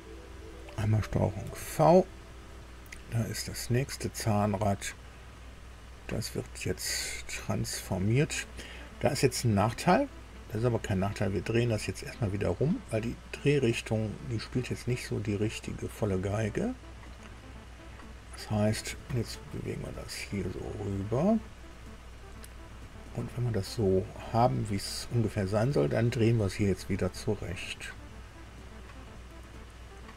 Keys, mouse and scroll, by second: 1.4 ctrl+v, 2.3-2.7 scroll down 2, 3.6 click, 5.5 right click, 7.4 click, 10.3-17.8 drag, 18.6-24.1 drag, 24.7-25.3 scroll up 4, 27.5-30.1 drag.